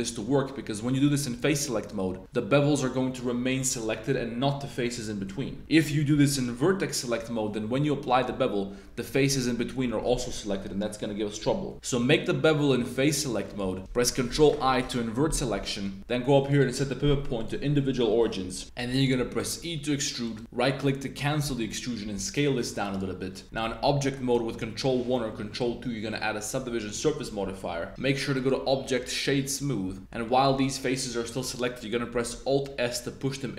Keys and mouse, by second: 1.2 shift+click, 5.8 super+1, 6.1 super+b, 8.1 shift+click, 11.7 super+z, 11.7 super+b, 13.4 shift+click, 14.6 super+i, 16.6-17.4 drag, 18.6 super+i, 18.6 click, 19.5 e, 20.2 right click, 22.0 s, 23.5 Tab, 24.7 super+1, 25.5 super+2, 26.6 Tab, 27.7 Tab, 28.4 click, 29.8 Tab, 30.0 click, 30.2 click, 32.2 alt+s.